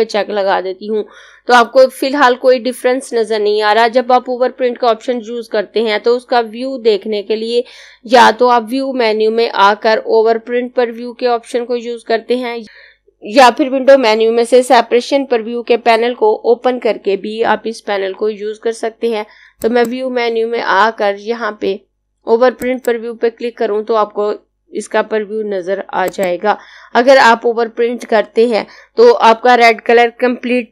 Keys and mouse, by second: 19.4 click, 22.4 click, 25.8 click.